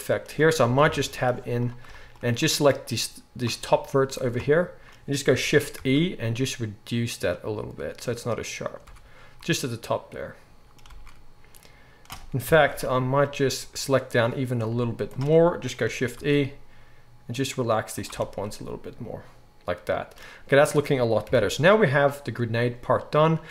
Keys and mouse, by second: 0.6 Tab, 0.8 KP_1, 1.1 z, 3.6 z, 4.5-8.7 middle drag, 5.7 shift+e, 8.7-9.9 right drag, 8.8 Tab, 9.9-13.9 drag, 10.8 Tab, 12.4 KP_1, 12.6 z, 13.9-18.0 middle drag, 14.7 z, 16.2 shift+e, 18.0-18.7 right drag, 18.1 Tab, 18.7-23.5 drag, 21.3 KP_1.